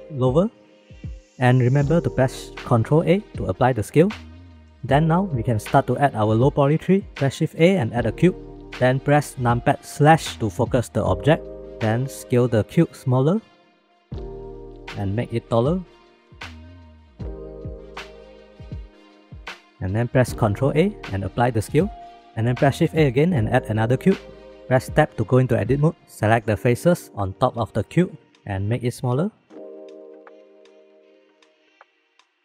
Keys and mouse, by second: 3.2 ctrl+a, 7.5 shift+a, 13.3 s, 15.3 s, 17.3 s, 18.6 s, 20.8 ctrl+a, 22.9 shift+a, 25.0 Tab, 26.8 click, 28.0 shift+click, 28.2 shift+middle click, 29.1 s, 30.2 g, 31.6 s.